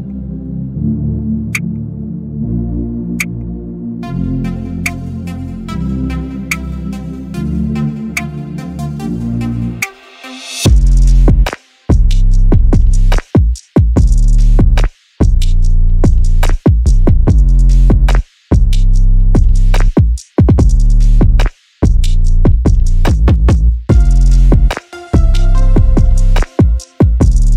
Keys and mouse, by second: 3.3-4.3 ctrl+middle drag, 6.8 g, 9.7 shift+middle click, 10.2 shift+z, 10.6 click, 12.5 click, 13.3-14.4 drag, 15.7 x, 17.0 shift+z, 17.6 middle click, 19.3 click, 21.0 click, 22.4 shift+click, 22.6 shift+click, 25.0 ctrl+z, 26.8 shift+click.